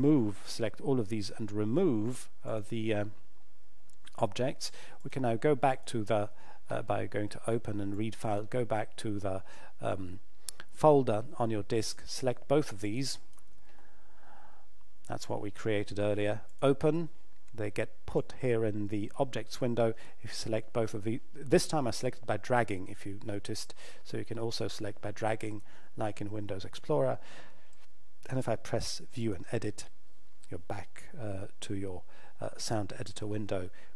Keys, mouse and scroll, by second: 2.5 click, 11.8 click, 16.5 click, 29.2 click.